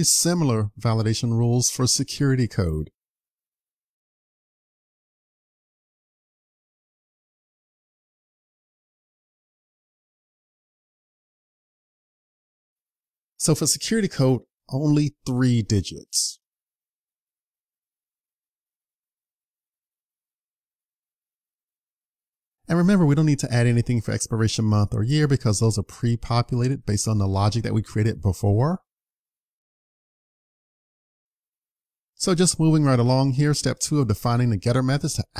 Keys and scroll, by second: 6.5 super+c, 11.3 super+v, 17.9 super+s, 18.8 super+s.